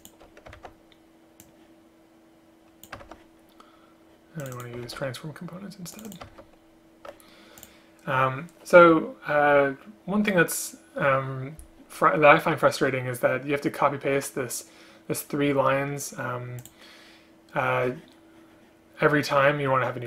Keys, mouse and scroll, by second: 0.1 shift+click, 0.7 ctrl+c, 3.2 ctrl+v, 5.0 ctrl+c, 6.4 ctrl+v.